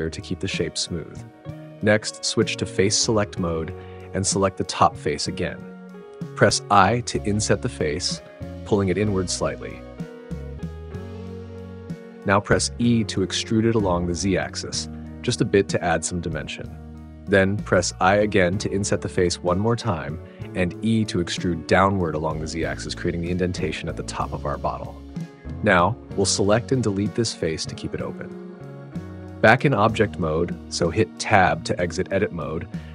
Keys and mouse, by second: 0.9 click, 3.5-6.4 drag, 6.4 i, 9.6 click, 10.2-12.3 shift+middle drag, 12.3 e, 15.6 click, 17.2 i, 19.4 click, 21.0 e, 24.8 click, 24.9-27.3 middle drag, 27.3 Delete, 30.5 click, 32.3 Tab.